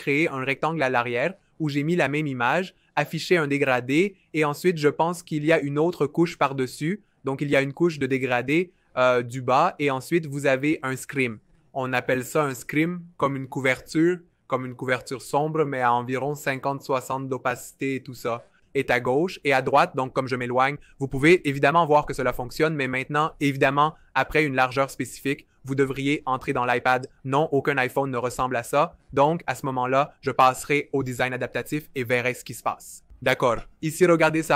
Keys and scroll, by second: 19.5 v, 28.8 super+z.